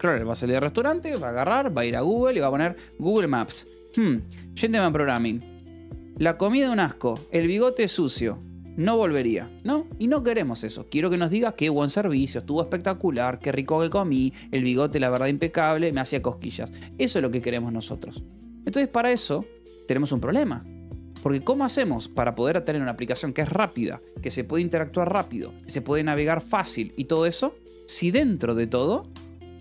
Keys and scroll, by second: 10.7 Escape, 16.3 Escape, 18.6 j, 20.1 k, 21.2 k, 21.7 j, 26.8 k, 27.4 k, 28.6 k.